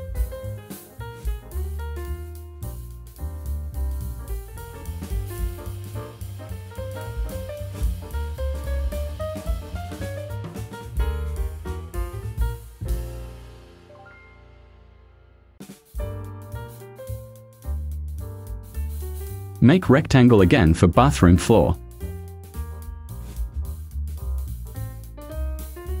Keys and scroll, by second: 0.7 Right, 1.9 Return, 14.8 ctrl+a, 16.2 Return, 23.8 0, 24.2 ,.